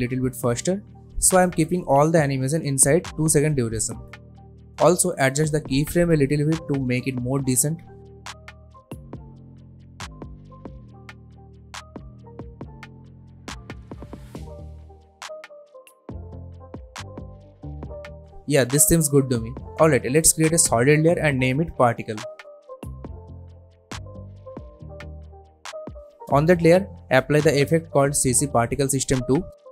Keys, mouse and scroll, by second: 0.0 u, 0.6-1.3 drag, 4.2 space, 4.7-5.9 drag, 7.8 space, 9.7 click, 10.7 space, 12.7-15.0 drag, 15.6 space, 17.4 click, 18.4 alt+scroll down 1, 18.7 alt+scroll up 1, 19.5 click, 20.3 right click, 20.8 click, 20.9 click, 22.2-24.8 typing, 26.5 click, 27.8-29.2 typing.